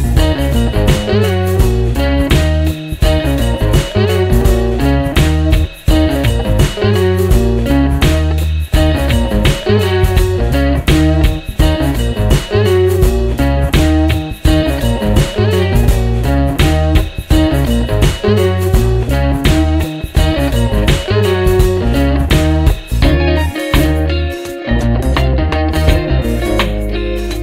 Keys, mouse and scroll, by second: 0.0 click, 2.2-2.9 drag, 3.2 click, 9.4 click, 10.8 click, 12.1 click, 14.4-15.6 drag, 16.7-18.5 drag, 19.5 click, 24.9 click, 26.9 click.